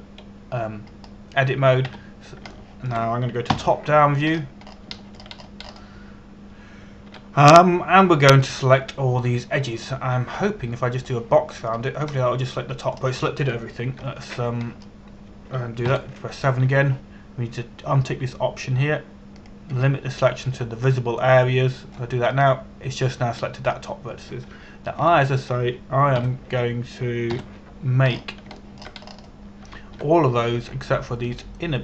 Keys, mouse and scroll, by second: 0.3 Tab, 2.5-3.6 scroll down 1, 3.6 a, 4.2 shift+middle click, 6.0-6.5 scroll up 1, 6.6 shift+middle click, 7.0 scroll up 1, 8.7 a, 11.1-12.0 scroll down 1, 12.0 b, 12.7 click, 13.8 middle click, 16.3 scroll down 1, 17.5 KP_7, 18.3 a, 21.0 click, 22.1 b, 23.0 click, 24.0 middle click, 26.7 ctrl+KP_1, 27.9 ctrl+KP_7, 29.7 scroll up 1, 30.2 shift+middle click, 30.7 scroll up 1.